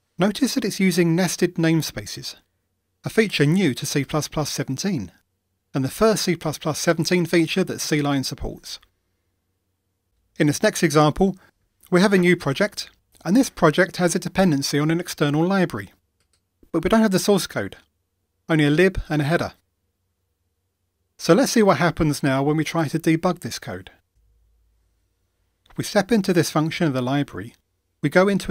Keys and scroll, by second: 24.1 ctrl+d, 26.7 F7.